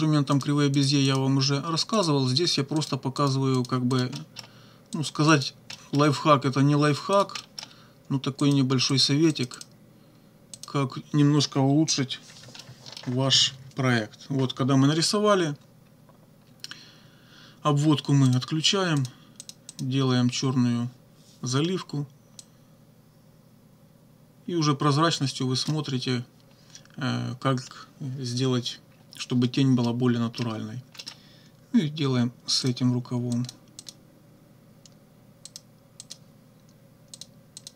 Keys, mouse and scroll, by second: 0.4 click, 0.8 click, 2.0 click, 2.8 click, 3.2 click, 3.6 click, 3.9 click, 4.1 middle click, 5.0 click, 5.3 click, 5.7 middle click, 7.1 click, 7.4 middle click, 8.4 click, 8.9 click, 9.3 click, 10.6 click, 12.2 -, 12.6 middle click, 18.3 click, 19.0 click, 19.4 click, 19.7 click, 22.4-25.9 drag, 29.8 click, 31.0 right click, 32.7 click, 33.3 click, 33.8 click, 35.5 click, 36.0 click, 37.2 click, 37.6 click.